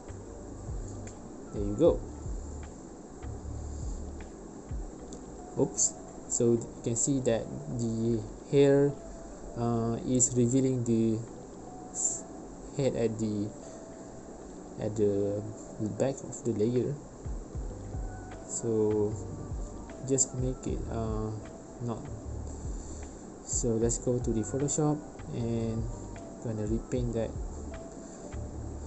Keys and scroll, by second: 3.1 space, 7.0 space, 10.3 3, 10.4 Return, 11.0 space, 13.4 space, 18.5 space.